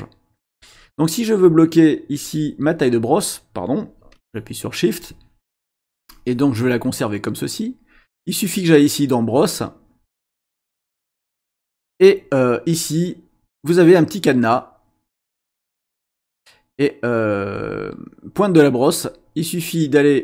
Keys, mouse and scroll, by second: 1.4 shift+click, 4.1 shift+click, 6.0 click, 7.6 click, 10.5 click, 19.0 click.